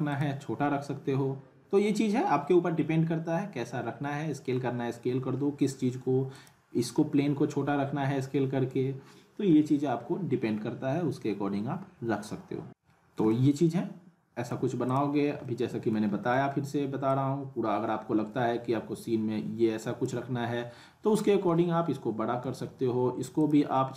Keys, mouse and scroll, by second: 0.1 click, 6.4 click, 12.7-13.2 scroll up 1, 13.3-14.6 alt+middle drag, 14.9 click, 15.2 scroll down 1, 15.4-16.0 alt+middle click, 16.1 scroll down 1, 16.3 r, 17.1-20.2 drag, 20.3-20.8 scroll down 1, 21.3 w, 22.4 ctrl+z, 23.4 click.